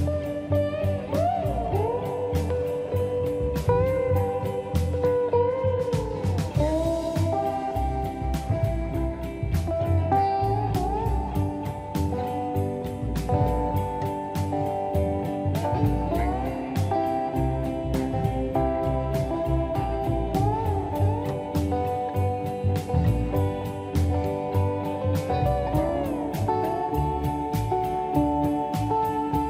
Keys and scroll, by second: 1.0 space, 13.8 m, 26.6 space.